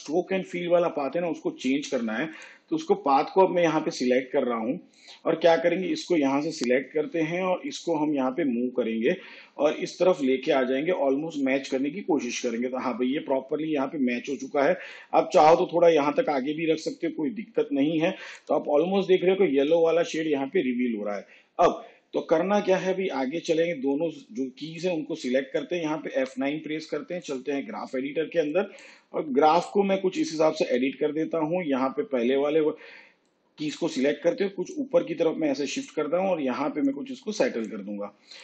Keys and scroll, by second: 4.1 space, 26.1 F9.